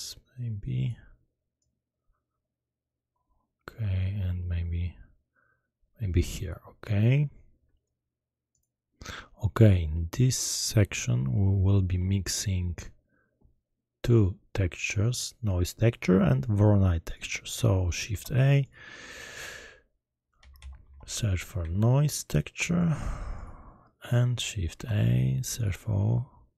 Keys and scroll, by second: 18.1 shift+a, 20.3-21.6 typing, 24.7 shift+a.